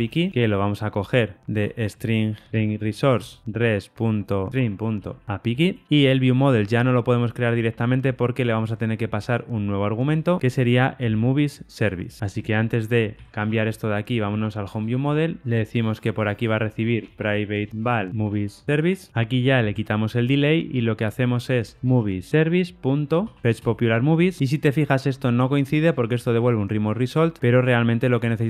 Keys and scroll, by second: 3.4 Return, 5.7 Return, 19.7 super+BackSpace, 19.7 ctrl+y, 22.3 Return, 23.5 Return, 24.6 super+b, 26.4 super+[, 26.4 ctrl+alt+Left.